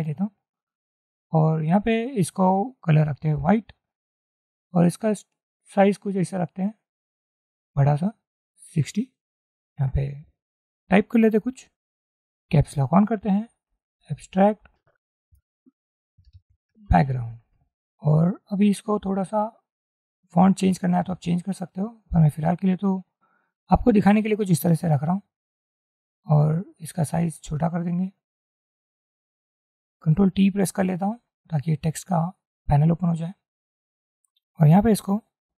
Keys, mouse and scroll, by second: 9.8 ctrl+a, 13.6-14.7 typing, 15.4 Return, 16.3-17.6 typing, 18.6 ctrl+a, 31.0 ctrl+t.